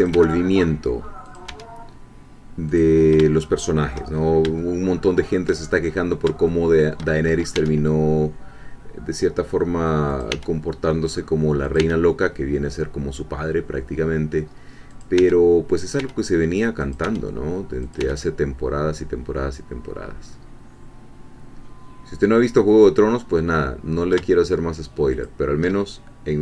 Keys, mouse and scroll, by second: 0.0 click, 0.1 e, 1.3 click, 1.5 e, 2.7 click, 3.4 shift+click, 4.2 shift+scroll up 2, 4.6-5.6 shift+middle drag, 6.4-7.5 shift+middle drag, 7.6 e, 10.1 click, 10.3 e, 11.6 click, 11.8 e, 14.9 click, 15.2 e, 15.8 click, 16.0 e, 16.8 click, 17.0 e, 17.9 click, 18.0 e, 25.2 shift+click.